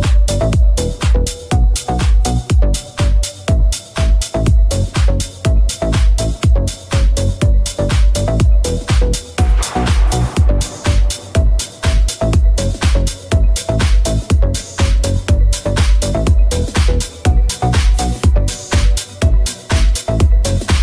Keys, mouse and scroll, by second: 4.2 /, 4.2 z, 6.1 3, 8.9 z, 10.1 alt+z.